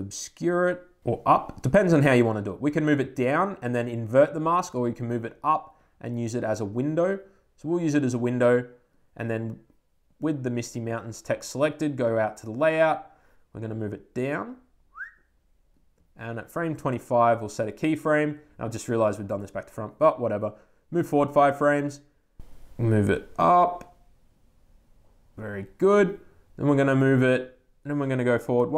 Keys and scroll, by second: 28.4 Right.